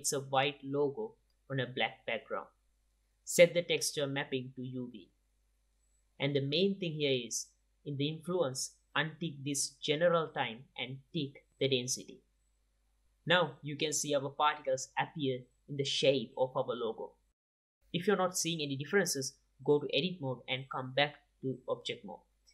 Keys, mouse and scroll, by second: 1.8-3.7 drag, 4.3-5.9 drag, 6.0-12.7 drag, 12.7-15.4 middle drag, 15.6-19.4 middle drag, 22.2-22.5 drag.